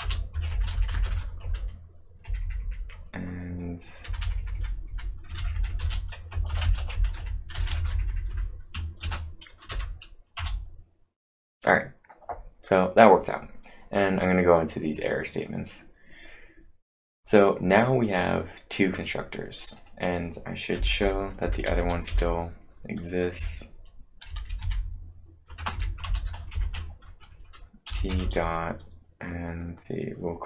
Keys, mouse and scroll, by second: 0.0 Return, 0.5-2.6 typing, 5.4 ctrl+v, 5.5-8.8 typing, 9.0 ctrl+`, 9.7 Up, 10.4 Return, 17.1 Return, 17.1-17.6 scroll up 1, 17.4-18.1 typing, 17.6-19.0 scroll down 1, 19.0 scroll down 2, 19.7 click, 20.8-22.6 typing, 25.7 ctrl+n, 26.1 Return, 26.3-28.7 typing.